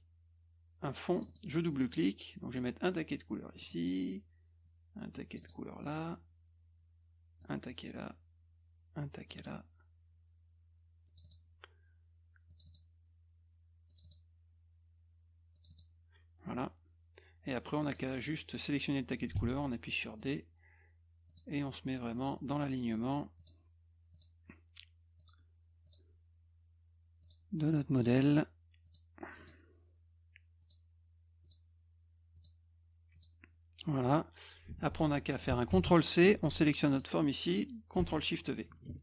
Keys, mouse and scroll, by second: 1.2 click, 1.3 click, 3.6 click, 3.8 click, 5.2 click, 5.4 click, 7.4 click, 7.7 click, 9.2 click, 9.4 click, 11.1 click, 11.2 click, 12.5 click, 12.7 click, 13.9 click, 14.0 click, 15.6 click, 15.7 click, 17.9 click, 19.4 d, 20.2 click, 21.3 click, 22.2 click, 23.4 click, 24.1 click, 25.2 click, 25.9 click, 27.2 click, 28.0 click, 28.9 click, 29.4 click, 30.6 click, 31.4 click, 32.4 click, 33.2 click, 34.7 F1, 35.7 ctrl+c, 36.2 F2, 36.4 click, 36.9 click, 38.7 ctrl+shift+v.